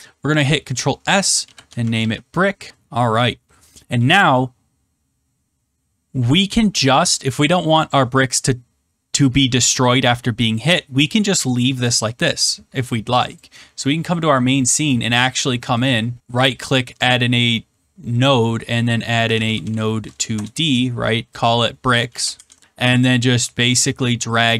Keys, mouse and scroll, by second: 1.1-2.5 typing, 13.4 click, 14.3 middle click, 15.8 click, 16.5 click, 18.9-20.0 typing, 20.2 Return, 21.4 click, 22.0-23.1 typing.